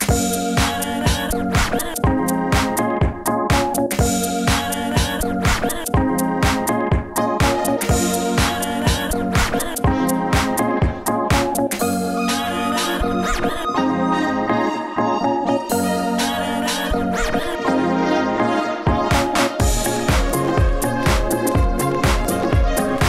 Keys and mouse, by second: 0.6 f, 1.2 f, 4.9 f, 6.9 alt+s, 7.2 Tab, 8.3 q, 9.9 g, 10.6 b, 10.9-12.1 drag, 11.7 g, 13.1 Tab, 14.2 middle click, 14.4 Tab, 14.9 click, 15.3 q, 16.1 g, 17.1 g, 19.7 Tab, 22.6 s, 22.7 f.